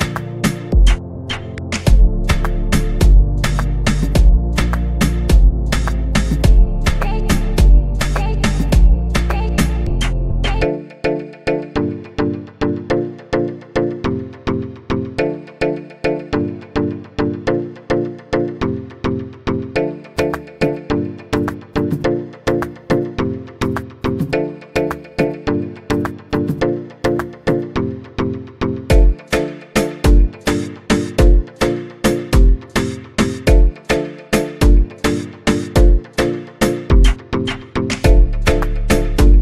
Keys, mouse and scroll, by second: 3.1-6.2 drag, 6.8 click, 10.6-13.6 drag, 15.8 KP_0, 18.6-23.0 drag, 23.0-26.7 middle drag, 26.7 click, 28.4-31.6 drag, 35.4 space, 37.2 space, 38.4-39.4 scroll down 6.